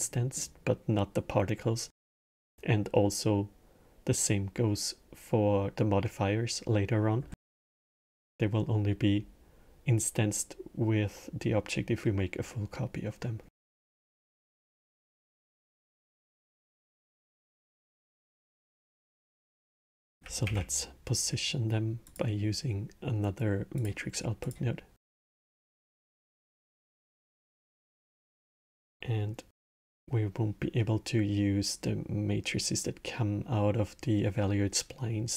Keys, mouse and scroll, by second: 13.3-20.3 middle drag, 20.3 shift+a, 24.9 click, 25.9 click, 26.9-28.5 middle drag, 28.5 click.